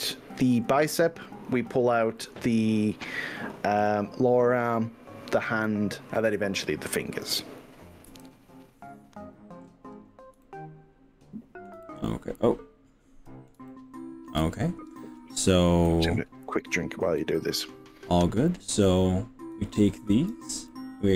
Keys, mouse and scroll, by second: 1.3 middle click, 2.2-6.9 shift+middle drag, 8.1 KP_1, 9.6-10.5 scroll up 5, 10.4 shift+middle click, 11.8 middle click, 12.3-14.3 middle drag, 14.4 middle click, 15.9-18.7 middle drag, 19.6 click, 20.7 middle click.